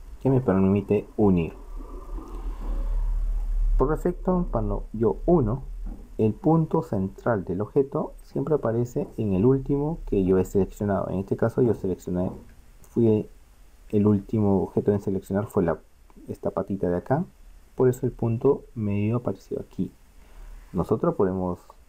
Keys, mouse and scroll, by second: 2.5 middle click, 6.0-19.7 middle drag, 19.7-21.5 drag, 21.5-21.8 middle drag.